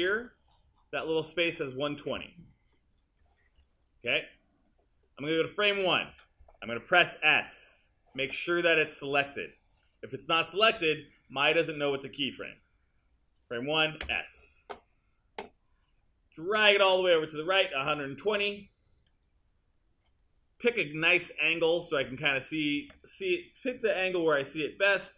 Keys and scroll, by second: 14.1 s.